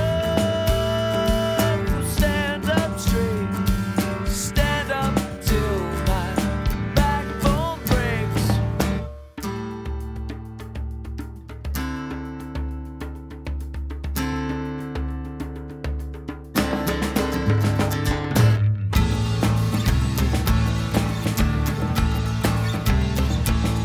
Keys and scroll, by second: 3.4 Delete.